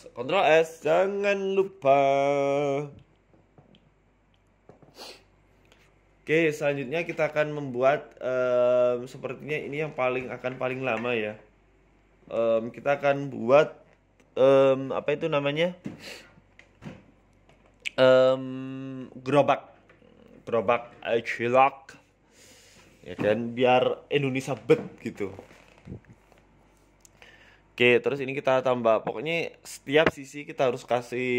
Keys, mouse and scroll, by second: 0.5 shift+middle click, 0.5 scroll down 2, 5.7 shift+a, 6.7 scroll down 3, 6.9 shift+middle click, 7.4 g, 8.1 shift+scroll up 1, 8.3 shift+middle click, 8.7 s, 10.5 scroll up 2, 10.7 shift+middle click, 11.0 middle click, 11.6 s, 13.4 middle click, 15.0 KP_1, 15.2 Tab, 15.5 scroll up 1, 16.2 click, 16.2-16.7 scroll up 2, 16.7 right click, 17.0 middle click, 18.0 shift+right click, 18.2 middle click, 18.7 middle click, 19.1 KP_3, 19.3 KP_1, 19.9 ctrl+r, 21.3 s, 23.5 ctrl+r, 24.5 z, 25.2 s, 28.3 KP_3, 28.9 ctrl+r, 30.5 s.